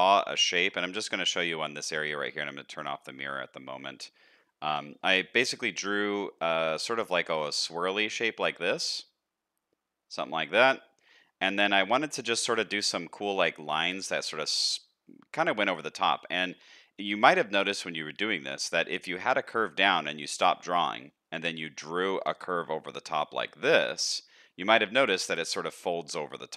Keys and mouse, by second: 0.2 shift+middle click, 0.8 middle click, 2.7 click, 3.4 shift+middle click, 3.9 middle click, 4.6 KP_1, 5.5 shift+middle click, 7.4-10.3 drag, 11.2 shift+middle click, 16.3 shift+middle click, 25.2-26.5 middle drag.